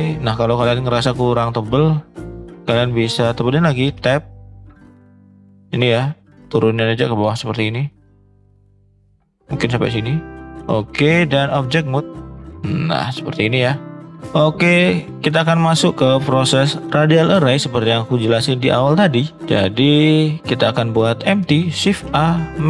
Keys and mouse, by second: 0.5 shift+middle drag, 3.8 Tab, 4.9 click, 5.3 click, 6.3-8.1 drag, 9.0-10.5 drag, 11.0-11.5 drag, 11.9-12.4 middle drag, 12.7 middle drag, 13.5-19.3 drag, 19.3-19.8 middle drag, 20.1 middle drag, 21.2 middle drag, 21.9 shift+a.